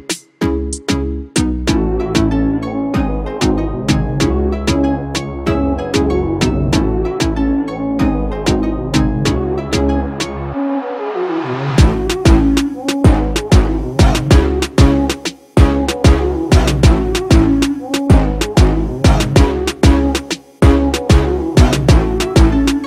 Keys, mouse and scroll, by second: 0.1-2.1 typing, 5.2 double click, 9.0 double click, 9.1 8, 21.9 ctrl+=, 22.4 ctrl+=.